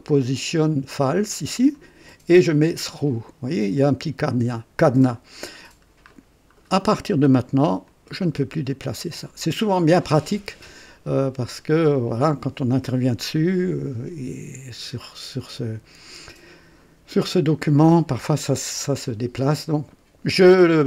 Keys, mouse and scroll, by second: 1.0 click, 1.7 click, 2.9 click, 5.4 scroll up 1, 6.1-6.6 middle drag, 6.6 scroll up 1, 7.8-9.3 drag.